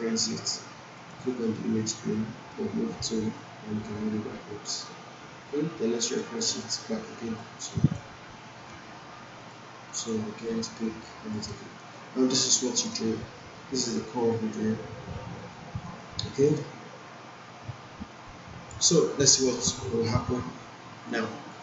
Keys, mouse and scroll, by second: 7.1 alt+click, 8.6 ctrl+z, 9.4 click, 11.0 alt+click, 11.4-12.8 alt+right click, 11.9-13.8 alt+drag, 14.3-15.5 alt+drag, 15.8 alt+middle click, 16.5-18.7 alt+drag, 18.9 alt+middle click, 20.1-21.1 alt+click.